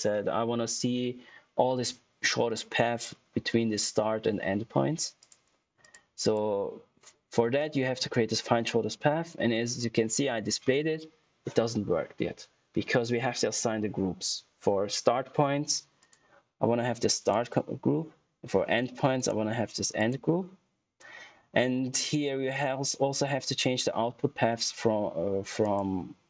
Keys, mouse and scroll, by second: 5.1 click, 15.9 click, 19.1 click, 25.5 click.